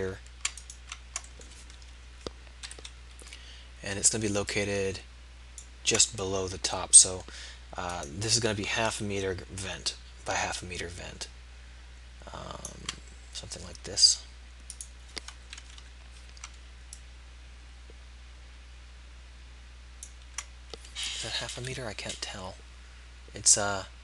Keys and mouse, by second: 0.6-1.9 middle drag, 1.9 KP_3, 2.7 KP_1, 8.0-9.0 middle drag, 9.0 KP_1, 14.8-15.8 middle drag, 15.8 KP_1, 21.1-24.0 middle drag.